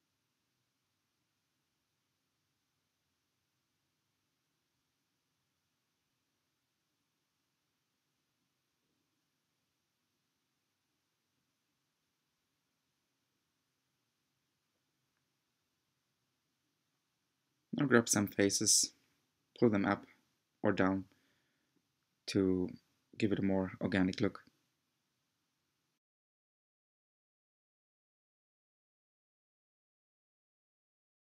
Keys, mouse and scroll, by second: 0.1-4.1 middle drag, 4.1 click, 4.4 Tab, 5.2 click, 5.7 click, 6.1-8.3 middle drag, 8.3-9.5 drag, 9.5 g, 13.1-16.1 middle drag, 16.1-17.3 drag, 17.3 g, 20.0-23.1 middle drag, 24.0 scroll up 2, 24.3-26.8 middle drag, 26.8 click, 27.7 shift+click, 28.1-29.3 middle drag, 29.3-29.7 scroll down 1, 30.5 g.